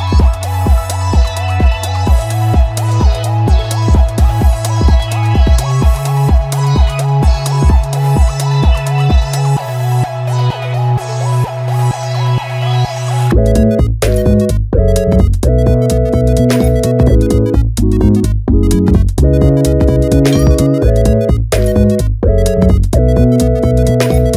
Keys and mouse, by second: 0.1 click, 0.5 click, 1.3-2.1 drag.